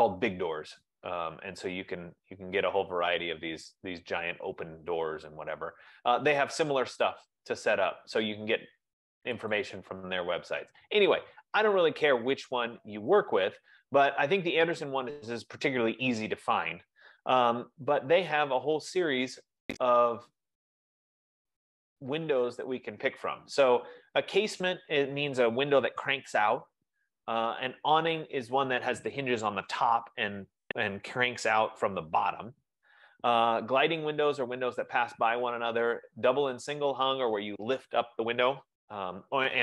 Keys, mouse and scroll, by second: 10.3-11.9 drag, 17.3-17.9 scroll, 18.1-18.9 scroll, 20.2-20.9 scroll.